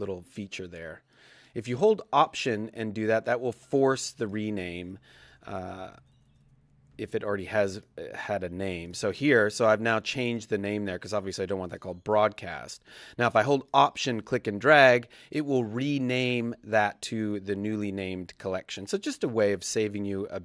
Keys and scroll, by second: 5.1 BackSpace.